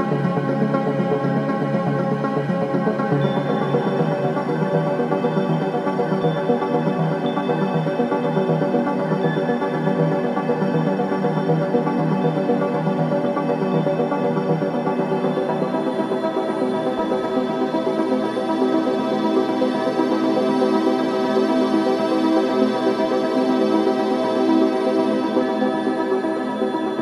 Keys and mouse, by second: 1.3 KP_Divide, 2.4 Tab, 3.0-5.1 alt+drag, 5.3-9.4 alt+drag, 10.2-12.0 alt+drag, 12.2 j, 13.5 ctrl+z, 14.7-16.3 alt+drag, 16.4-17.6 drag, 17.6 k, 18.6 click, 19.9 click, 21.3 Return, 22.3-24.6 alt+drag.